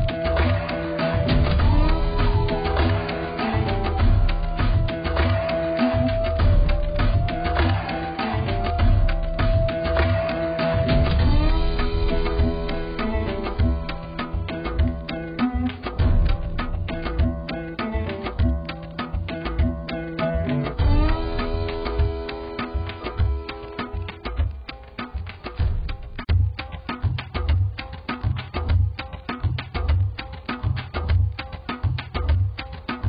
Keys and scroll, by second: 17.2 ctrl+z.